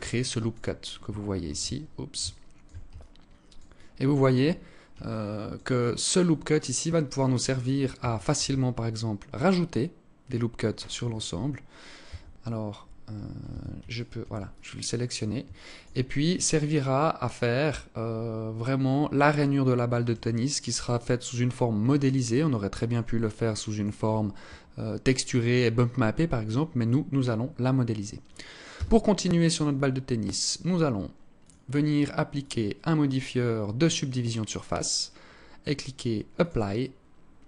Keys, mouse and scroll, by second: 0.9 shift+c, 1.7 alt+shift+click, 2.4 alt+click, 3.2 alt+click, 3.6 alt+shift+click, 4.0 scroll up 1, 4.5 alt+click, 4.5 scroll up 4, 5.2 alt+click, 7.7 ctrl+r, 11.5 Tab, 12.9 Tab, 13.3 alt+right click, 13.9 alt+click, 14.9 alt+shift+click, 15.5 scroll down 1, 15.7 scroll up 2, 19.9 alt+click, 22.7 alt+click, 28.2 Tab, 30.9 click, 31.8 click, 35.8 click.